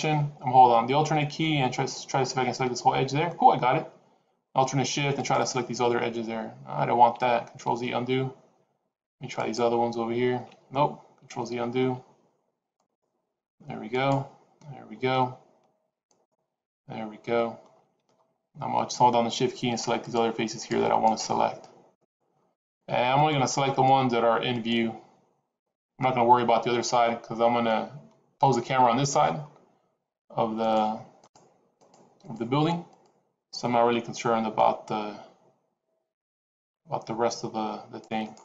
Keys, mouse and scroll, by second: 2.0 alt+click, 5.0 alt+shift+click, 7.6 ctrl+z, 9.3 alt+shift+click, 11.2 ctrl+z, 12.6 alt+shift+click, 14.0 alt+shift+click, 16.0 alt+shift+click, 19.9 shift+click, 20.4 shift+click, 20.9 shift+click, 21.8 shift+click, 23.2 shift+click, 23.8 shift+click, 24.6 shift+click, 25.5 shift+click, 26.8-27.4 scroll down 5, 27.6 middle click, 29.0-29.5 scroll up 4, 30.5 shift+click, 31.1 shift+click, 31.8 shift+click, 32.2 shift+click, 33.0 shift+click, 33.8 c.